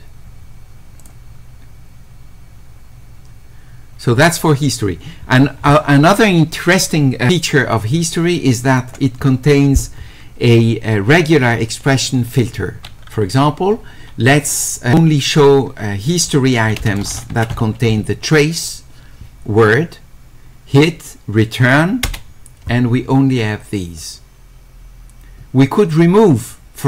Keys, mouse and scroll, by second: 1.0 click, 8.8 click, 16.8-18.0 typing.